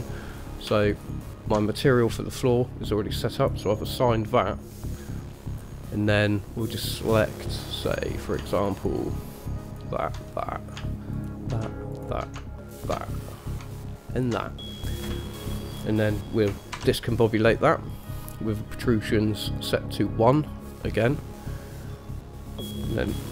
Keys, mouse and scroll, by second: 0.5 click, 1.1 alt+shift+click, 1.3 alt+shift+click, 3.6 click, 5.1 middle click, 8.1 click, 8.8 alt+shift+click, 9.9 alt+shift+click, 10.5 middle click, 11.3 alt+shift+click, 12.1 alt+shift+click, 12.9 alt+shift+click, 13.3 middle click, 14.3 alt+shift+click, 15.7 middle click, 16.9 shift+a.